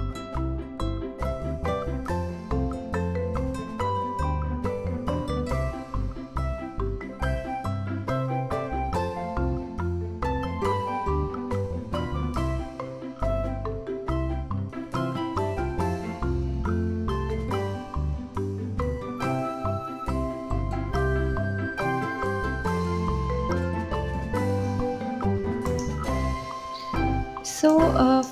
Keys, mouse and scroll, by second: 0.5 click, 1.2 g, 2.5 KP_3, 3.9 click, 5.0 KP_1, 5.7 click, 6.6 click, 7.0 shift+d, 9.6-11.2 scroll down 2, 11.2 click, 12.1 shift+d, 13.8-14.6 scroll up 10, 14.6 s, 16.3 g, 17.0 s, 18.4 KP_3, 19.4 g, 20.5 click, 21.6 KP_1, 22.7 s, 24.4 g, 24.8 s, 25.5-27.2 scroll up 1, 28.1 click.